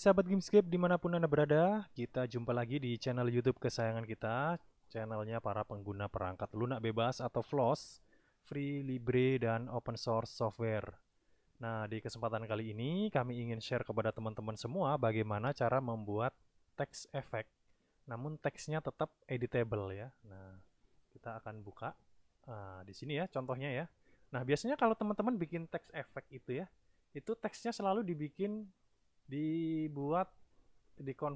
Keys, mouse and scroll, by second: 10.7 click, 21.8 click.